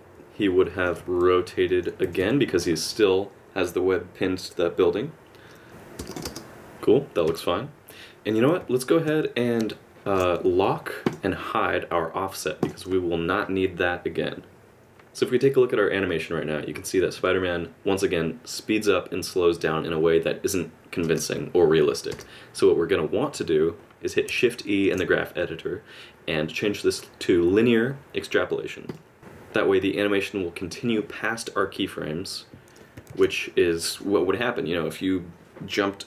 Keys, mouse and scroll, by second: 1.0 r, 2.0 r, 5.7 click, 5.7 space, 6.0 space, 6.1 click, 6.2 space, 7.3 space, 9.2 ctrl+z, 11.0 click, 12.6 click, 14.7 space, 21.0 space, 23.8 shift+e, 24.8 shift+e, 29.8 click, 31.6-32.8 KP_Subtract, 33.1 alt+a, 33.6 middle click.